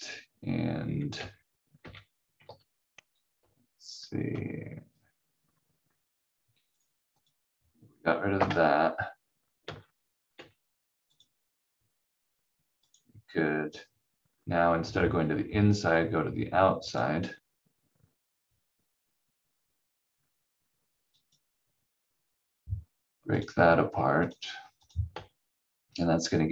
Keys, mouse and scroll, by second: 1.1 v, 1.7 v, 2.4 ctrl+z, 3.4 v, 4.2 v, 6.7 click, 8.3 Delete, 9.6 v, 10.3 v, 11.1 click, 16.8 click, 21.1 click, 25.0 v.